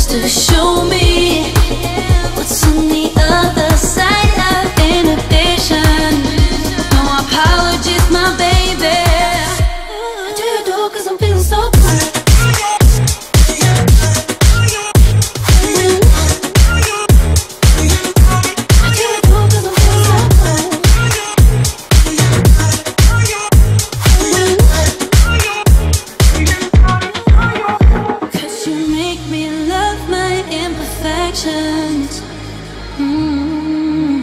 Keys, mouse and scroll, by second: 0.0 click, 0.0 click, 0.4 click, 0.4 shift+click, 1.7 m, 1.8 click, 3.0 Right, 3.1-4.4 typing, 5.2-5.6 scroll down 1, 5.6 click, 5.9-6.5 scroll up 1, 6.9-8.4 shift+middle drag, 8.4 b, 11.2 click, 17.7-25.2 drag, 25.2 space, 26.0-34.2 drag.